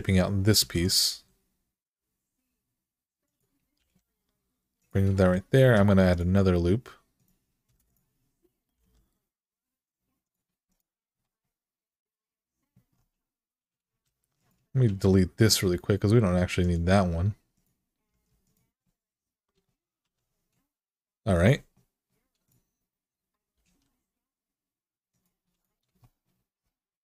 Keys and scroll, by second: 0.4-0.9 typing, 3.6 g, 5.4 k, 7.4 Return, 8.5 g, 13.8-14.6 typing, 17.9 x, 19.8 1, 23.3 g.